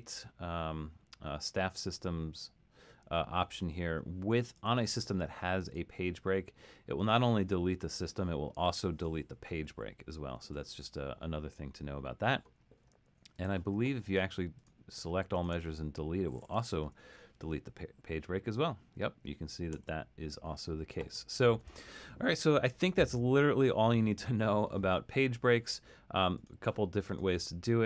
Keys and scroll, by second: 10.6 super+z, 16.9 BackSpace, 19.8 super+z.